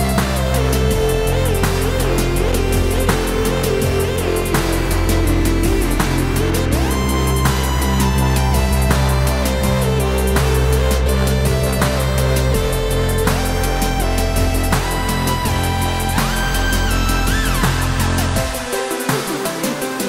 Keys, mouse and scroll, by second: 2.9 click, 5.0 shift+a, 6.0 click, 7.2 shift+right click, 7.7 shift+a, 9.2 s, 12.6 click, 13.2 KP_7, 13.8-14.2 scroll down 1, 15.4 b, 15.8 click, 17.6 click, 17.9 click, 19.5 click.